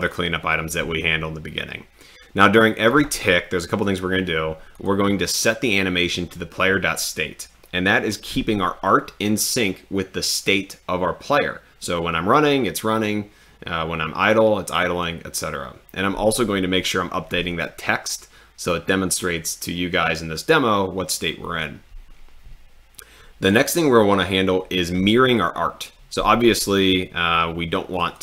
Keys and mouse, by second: 4.8 click, 16.3 click, 27.9 click.